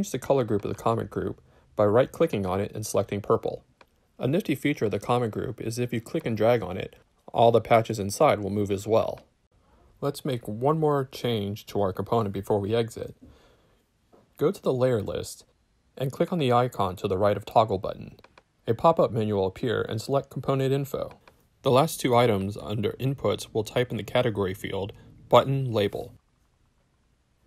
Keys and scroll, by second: 23.2-24.7 typing.